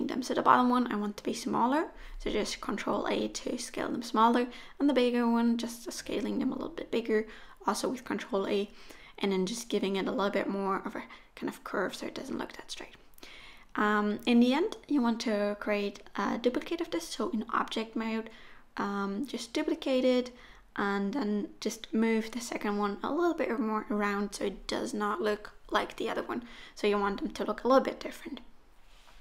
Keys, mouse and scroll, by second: 0.2 click, 0.8 ctrl+a, 1.9 click, 2.3 ctrl+a, 3.5 middle click, 4.6 KP_1, 5.5 click, 6.0-6.5 scroll down 2, 6.3 Tab, 7.0 shift+d, 8.8 r, 10.0 middle click, 10.2 Tab, 10.3 middle click, 10.6 click, 10.9 click, 11.8 g, 11.8 KP_3, 12.3 g, 12.7 middle click, 13.2 Tab, 13.3 click, 13.5 shift+click, 13.6 Tab, 13.8 middle click, 14.0 click, 14.2 middle click, 14.4 middle click, 14.6-17.7 typing, 15.7 click, 16.4 middle click, 16.8 middle click, 17.1 middle click, 18.6 middle click, 18.8 Tab, 19.0 click, 19.1 middle click, 19.3-19.8 scroll down 4, 19.5 middle click, 19.8 right click, 20.2 right click, 20.6 middle click, 20.9 click, 21.1 middle click, 21.5 alt+z, 21.7 middle click, 21.9-22.5 scroll up 4, 22.0 middle click, 22.5 click, 22.6 middle click, 22.8-23.5 scroll up 4, 23.0 click, 23.5-26.0 typing, 24.5-24.8 scroll up 2, 25.3 click, 26.6 click, 26.6-27.0 scroll down 5, 26.7 middle click, 27.2 middle click, 27.3-27.6 scroll up 5, 27.6 click, 27.9 shift+click, 28.0 Tab, 28.2 shift+click, 28.4 Tab, 28.5 shift+click, 28.9 a.